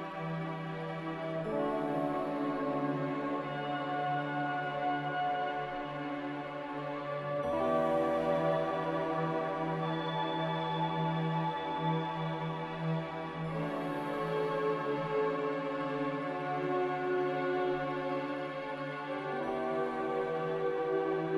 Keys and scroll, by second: 0.3-1.3 typing, 4.4-5.6 typing, 6.6 Return, 7.7 ctrl+c, 10.9-11.7 typing, 13.0 z.